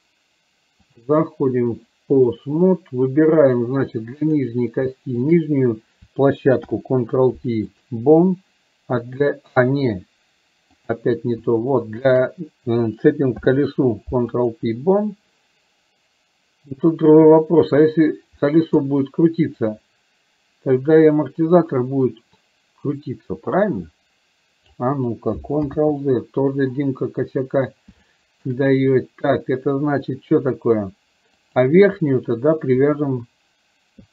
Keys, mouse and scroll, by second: 1.0-2.5 drag, 4.4 click, 5.4 shift+click, 6.9 ctrl+p, 10.8 click, 12.0 shift+click, 18.5-18.9 middle drag, 19.6-24.9 drag, 25.9 ctrl+z, 28.1 shift+middle click, 31.6 click.